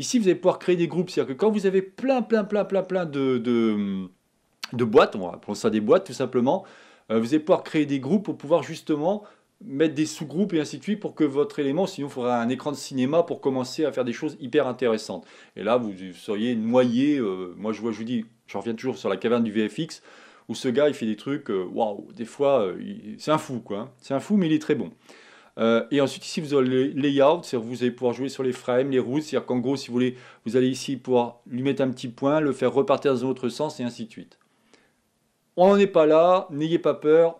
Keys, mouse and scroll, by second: 25.6 click.